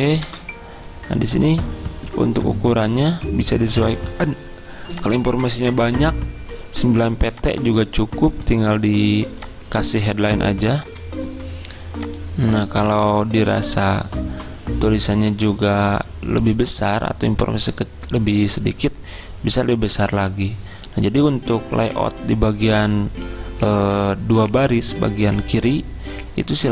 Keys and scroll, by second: 0.3 BackSpace, 11.0 F10, 11.0 alt+Tab, 11.2 F10.